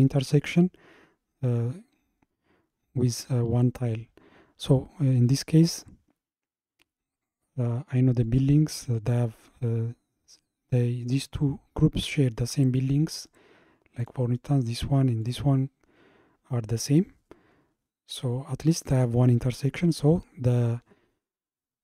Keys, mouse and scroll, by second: 3.1 click, 5.1 scroll up 2, 8.2 click, 9.1 click, 10.4-13.6 middle drag, 14.0 click, 15.2 click.